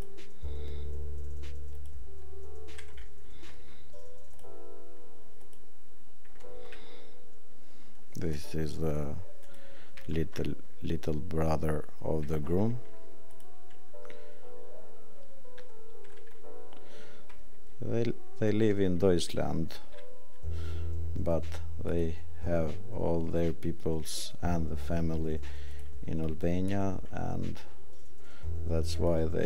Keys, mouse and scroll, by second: 9.4 click, 9.9 right click, 13.3 click, 25.7 click.